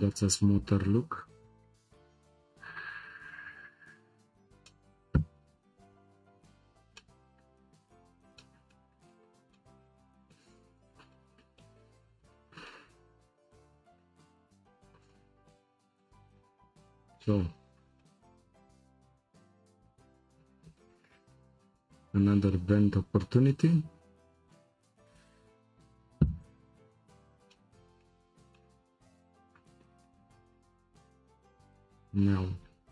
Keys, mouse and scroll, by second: 1.0-1.5 scroll up 4, 2.6-3.3 scroll down 4, 3.3-4.1 scroll up 2, 4.1-4.7 scroll down 4, 4.7-5.4 middle drag, 5.4-6.7 scroll down 2, 6.7 scroll down 1, 6.9-8.0 shift+middle drag, 8.0-8.4 scroll down 1, 8.4-10.6 shift+middle drag, 10.6-11.1 scroll up 6, 11.1-12.0 shift+middle drag, 12.0-12.3 scroll up 2, 12.3-14.3 shift+middle drag, 14.3-15.0 scroll up 1, 15.0 click, 15.6 Tab, 15.9 click, 16.9 3, 17.3 click, 17.7 shift+click, 18.0-21.1 middle drag, 25.0-26.2 scroll down 1, 26.2-26.6 scroll down 1, 27.0 scroll up 2, 27.2-27.5 scroll down 1, 27.5-28.9 shift+middle drag, 28.9-29.4 scroll up 3, 29.4 click, 30.0 scroll up 1, 30.0-30.6 shift+middle drag, 30.6-31.2 scroll down 1, 31.2-31.7 scroll down 1, 31.7-32.9 drag.